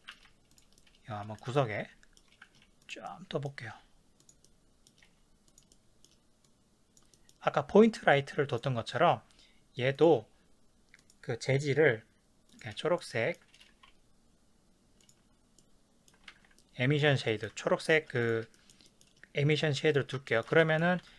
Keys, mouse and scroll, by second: 0.1 shift+d, 0.6 click, 0.8-2.8 middle drag, 2.5 g, 2.9 middle click, 2.9 click, 3.1-4.3 middle drag, 3.7 g, 4.3 click, 4.4-5.6 middle drag, 5.0 g, 5.6 click, 5.7-6.4 middle drag, 6.4 click, 7.1-8.2 middle drag, 8.2-13.0 drag, 13.0-18.2 ctrl+middle drag, 15.2 z, 16.3 ctrl+s, 18.2 click, 18.5 shift+middle click, 19.5 click, 20.3-21.1 shift+middle drag, 21.0 ctrl+s.